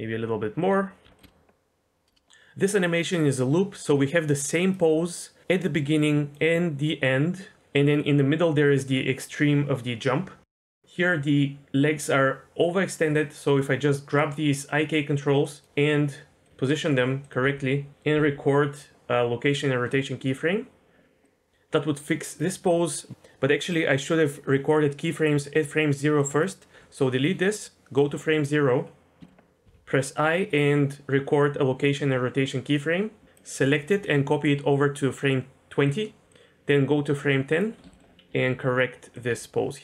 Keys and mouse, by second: 0.6 click, 1.0 i, 1.2 space, 4.4 click, 6.0 click, 7.0-9.2 drag, 10.5 click, 10.7 click, 15.4 click, 15.6-18.1 typing, 21.2-22.4 drag, 22.9 drag, 26.2-26.5 drag, 26.7 Delete, 27.4-28.0 drag, 29.2 shift+middle click, 33.2 click, 33.9 shift+d, 36.3-37.6 drag, 37.9 shift+middle click, 38.3-39.8 typing, 39.1 click.